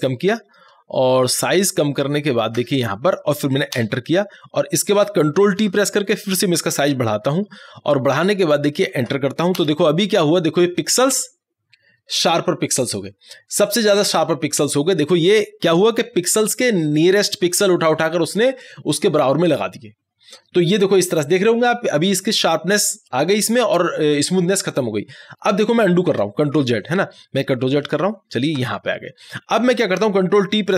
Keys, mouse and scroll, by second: 3.8 Return, 6.6-9.7 drag, 9.7 Return, 26.2 Return, 26.6 ctrl+z, 29.7 click.